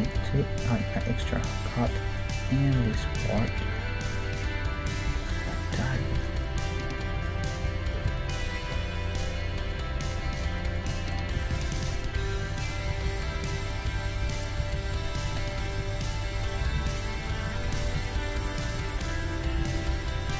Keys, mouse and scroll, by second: 1.9 middle click, 2.8-4.9 middle drag, 5.3-6.5 middle drag, 6.2 ctrl+Tab, 7.0 right click, 7.5 f, 7.8-9.0 middle drag, 8.1 ctrl+Tab, 9.2-12.7 middle drag, 11.3-12.4 right drag, 11.5 g, 12.7-20.3 right drag, 12.9 g, 14.6 g, 16.6 g, 17.6 g, 19.4 g.